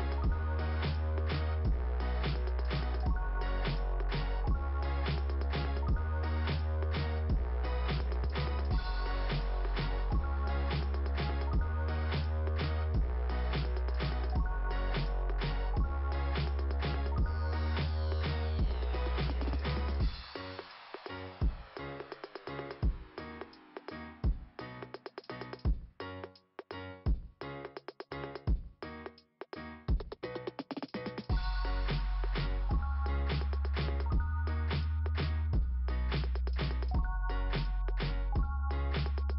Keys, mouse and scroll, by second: 6.4 click, 14.6 click, 15.8 click, 15.9 click, 17.8 click, 21.2 click, 25.0 click, 26.7 click, 26.8 click, 29.8 click, 31.2 click, 31.8 click, 32.5 click, 35.2 click, 37.9 click.